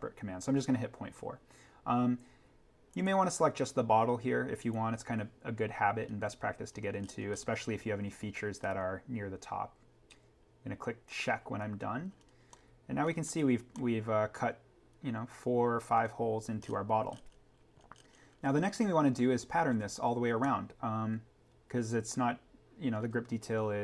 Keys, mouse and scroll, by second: 2.9 click, 6.1-6.7 scroll up 1, 11.1 click, 12.1-12.5 scroll down 1, 12.5 middle click, 12.7 scroll, 13.3 click, 13.7 middle click, 13.7-14.1 scroll down 1, 14.1-14.8 scroll, 14.8-16.6 scroll.